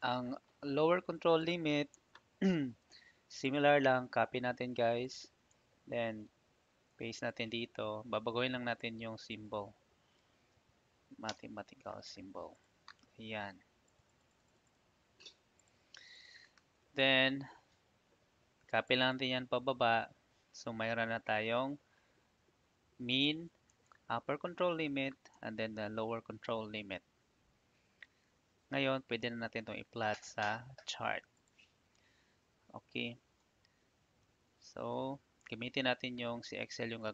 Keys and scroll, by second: 1.6 ctrl+c, 1.9 Tab, 5.3 Tab, 6.1 ctrl+v, 10.1 -, 11.2 Return, 23.6 Tab, 25.3 Tab, 33.5 ctrl+shift+Right, 34.2 ctrl+shift+Down.